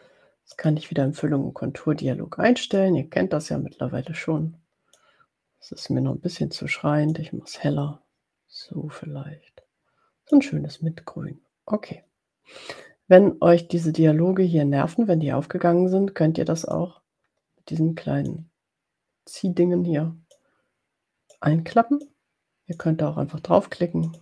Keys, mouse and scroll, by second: 0.8 click, 2.8-5.1 drag, 5.8-6.9 drag, 7.1-10.5 drag, 16.7-18.6 drag, 19.5-20.6 drag, 21.4-22.5 drag, 22.7 click, 24.0 click.